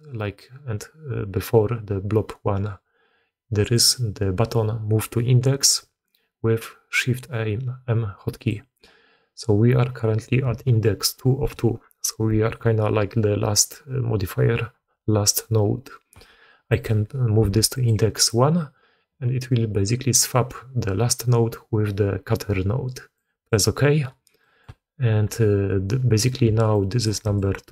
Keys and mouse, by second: 3.6-23.4 drag, 24.3 click, 25.4 d, 26.3 d, 26.6-26.9 drag, 27.1 d, 27.2 click.